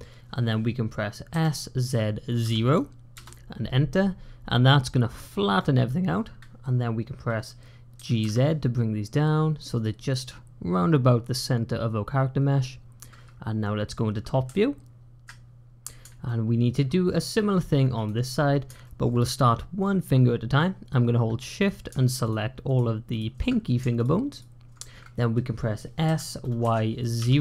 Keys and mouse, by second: 1.2 s, 7.8 g, 16.1-16.6 shift+drag, 17.9 click, 18.7 shift+click, 22.1 shift+click, 22.6 shift+click, 23.0 shift+click, 23.8 shift+click, 24.2 shift+click, 25.9 s.